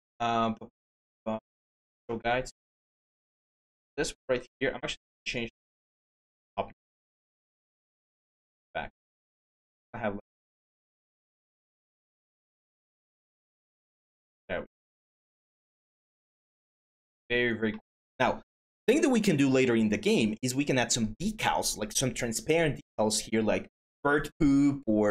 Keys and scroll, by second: 7.4 w.